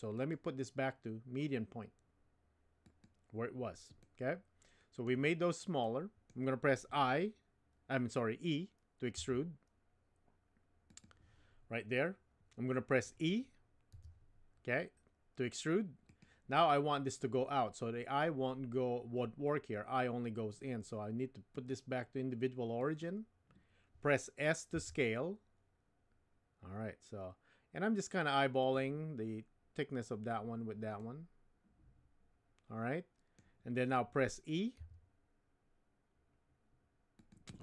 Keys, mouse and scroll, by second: 0.1-3.1 drag, 4.0-5.1 middle drag, 5.8 middle click, 9.2 e, 13.9 e, 21.6-23.0 drag, 24.7 s, 31.0-33.4 middle drag, 33.4 scroll down 1, 34.8 e.